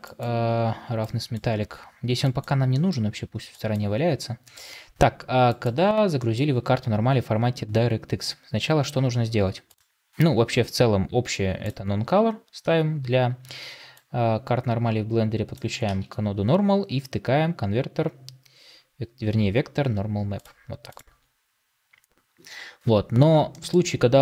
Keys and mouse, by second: 13.8-15.4 drag.